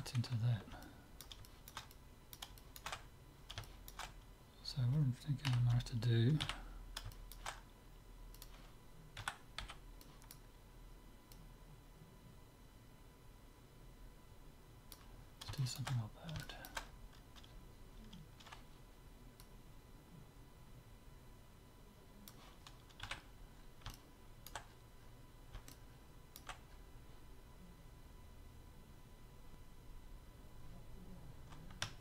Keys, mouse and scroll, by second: 0.8-5.6 middle drag, 5.6 KP_3, 6.4 z, 6.7-8.3 middle drag, 8.3-10.2 drag, 9.2 a, 9.6 b, 11.3-13.1 drag, 15.2-19.4 middle drag, 19.4-21.2 drag, 23.0 z, 23.5-27.6 middle drag.